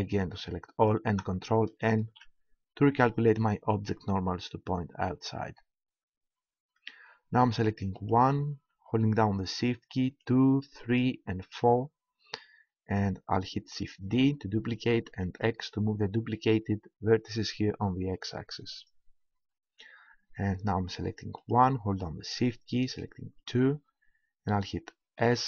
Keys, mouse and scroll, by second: 2.0 ctrl+n, 8.0-9.7 right drag, 10.0-13.4 right drag, 14.0 shift+d, 18.9-20.7 drag, 21.4-23.0 right drag, 25.1 s.